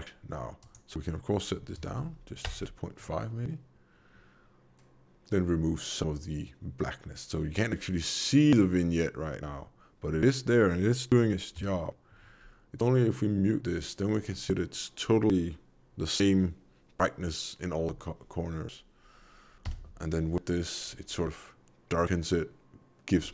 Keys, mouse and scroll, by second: 0.5 click, 11.5 m, 19.6 m.